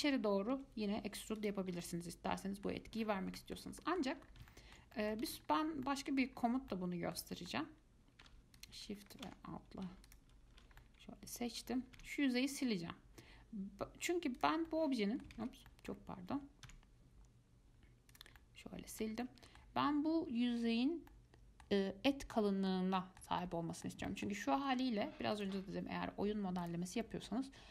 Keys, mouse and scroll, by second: 0.7 e, 1.9 scroll down 4, 2.0 middle click, 2.9 scroll up 1, 3.1-3.5 scroll down 5, 3.6 shift+middle click, 4.4 scroll up 4, 4.7 shift+middle click, 5.4 ctrl+z, 5.6 scroll up 3, 6.0 middle click, 6.4-6.9 scroll up 3, 6.9-8.8 middle drag, 8.8 shift+click, 9.2 alt+shift+click, 10.3 alt+shift+click, 11.0-12.2 middle drag, 12.2 x, 14.9 middle click, 15.5 ctrl+z, 15.9 middle click, 16.9 x, 18.6-25.5 middle drag, 25.5-27.2 drag, 27.2-27.7 middle drag.